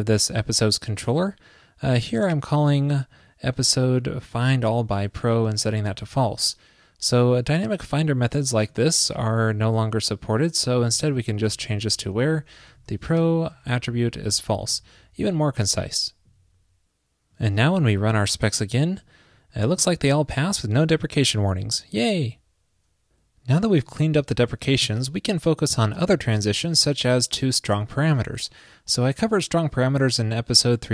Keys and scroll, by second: 13.7 super+Right, 14.1 super+s.